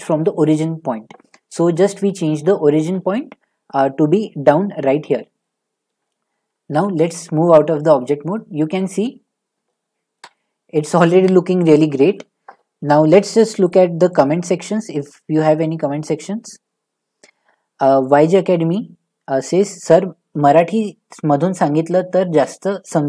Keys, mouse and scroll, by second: 2.2 middle click, 2.8 shift+middle click, 3.7 middle click, 5.9 shift+middle click, 6.7 Tab, 8.8 middle click, 9.1 middle click, 9.8 middle click, 10.2 shift+middle click, 11.0 middle click, 12.1 shift+middle click, 12.1 middle click, 13.7 click, 17.3 middle click.